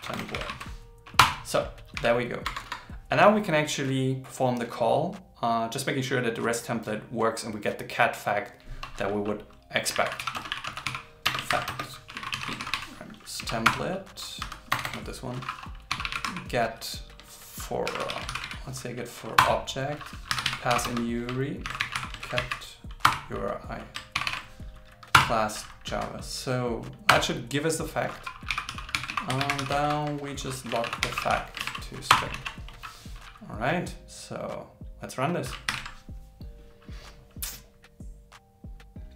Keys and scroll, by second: 0.4 shift+t, 11.5 shift+o, 12.6 shift+t, 17.9 shift+f, 18.3 shift+o, 21.7 shift+c, 22.2 shift+f, 24.2 shift+., 29.9 shift+8, 32.7 super+s, 35.7 ctrl+shift+r.